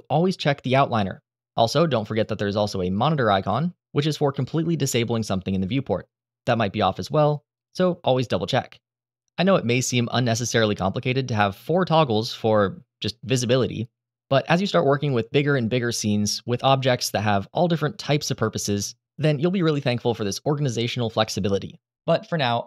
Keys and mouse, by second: 1.8-4.7 drag.